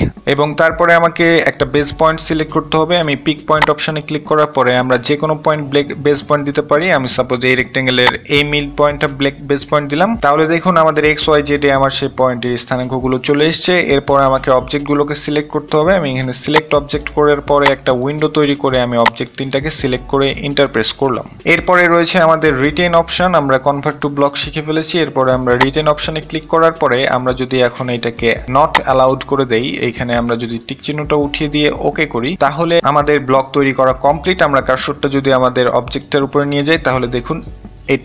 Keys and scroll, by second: 19.5-20.6 typing.